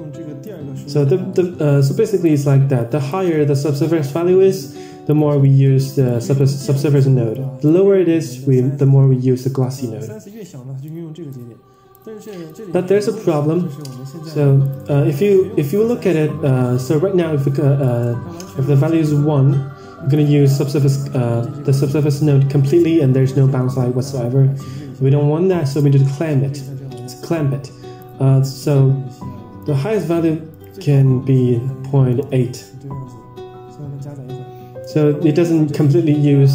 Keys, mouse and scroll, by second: 0.3-2.1 drag, 2.7 click, 4.0-5.1 drag, 5.3 middle drag, 6.0 click, 7.3 click, 8.8 middle click, 9.3 middle click, 10.8-11.3 drag, 11.8-12.4 drag, 14.7 click, 16.3 Tab, 17.7-18.0 drag, 19.3-20.3 drag, 21.9 Tab, 27.3-28.1 drag, 29.6 click, 30.4-32.8 drag, 33.7 scroll down 2.